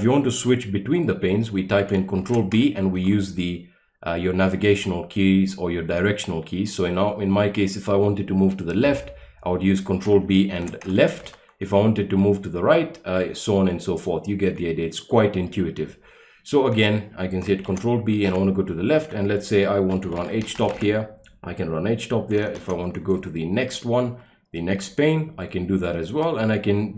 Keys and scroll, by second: 2.1 ctrl+b, 2.9 Left, 10.5 ctrl+b, 11.2 Left, 17.6 ctrl+b, 18.2 Left, 19.7-21.0 typing, 22.2-23.0 typing, 23.1 Right, 26.7-26.9 typing.